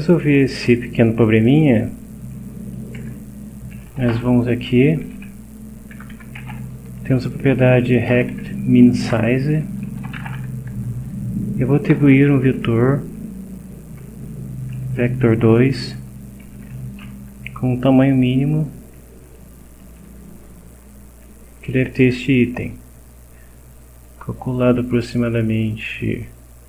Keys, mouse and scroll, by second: 1.8 click, 3.0 Return, 3.5-4.6 typing, 5.7-10.9 typing, 9.1 Return, 11.9 c, 14.0 Return, 15.6-17.3 typing, 19.8 2, 24.0 click, 26.0 click.